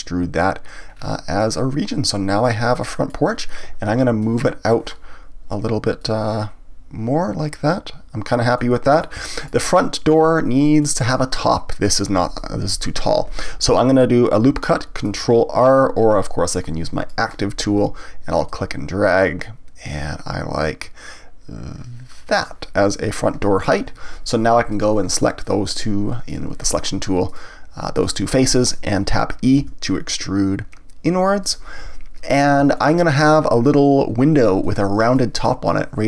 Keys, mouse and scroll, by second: 0.9-1.4 scroll down 1, 1.4-4.6 middle drag, 4.6-8.5 drag, 8.5-13.8 middle drag, 16.2-21.5 drag, 24.7 click, 26.3 click, 27.3 click, 27.9 shift+click, 28.6-29.6 middle drag, 29.6 e, 31.5 click, 32.8-36.0 shift+middle drag.